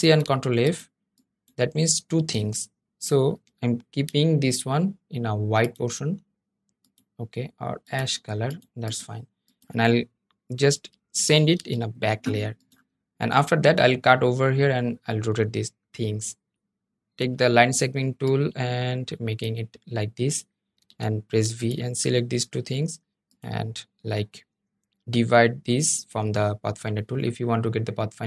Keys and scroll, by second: 2.1 super+z, 11.3 super+{, 17.7 \.